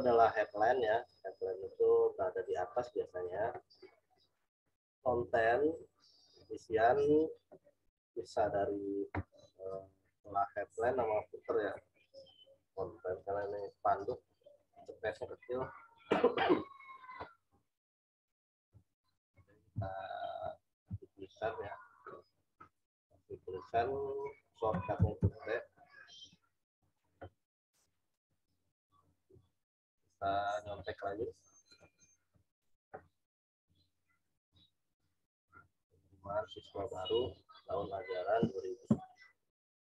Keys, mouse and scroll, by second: 19.7 t, 22.7 click, 24.6 t, 28.7 click, 31.6 click, 32.6 click.